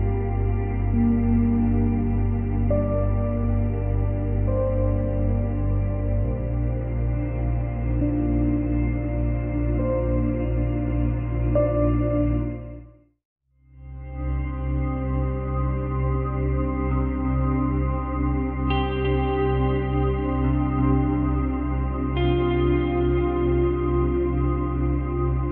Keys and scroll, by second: 15.4 ctrl+z, 22.3 space.